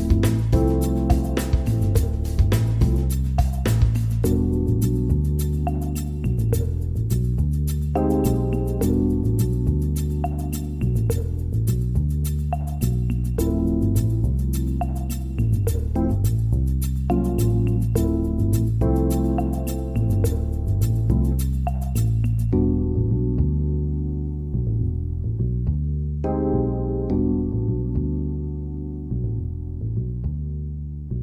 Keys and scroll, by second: 22.1 ctrl+g, 23.9 ctrl+z, 27.8 ctrl+r.